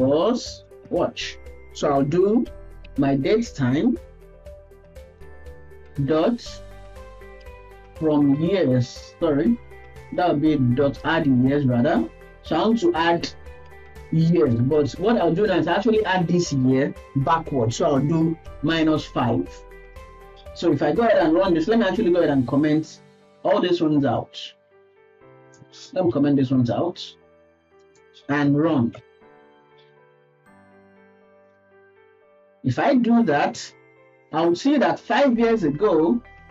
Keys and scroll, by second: 9.2 ctrl+shift+Left, 10.1 BackSpace, 11.9 Down, 12.3 Down, 12.4 Down, 12.7 Down, 26.7 ctrl+s.